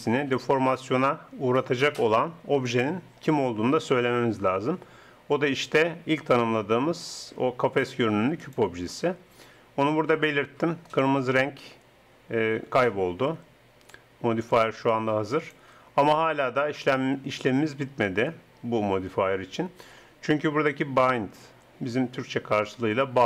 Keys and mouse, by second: 2.7-16.4 drag.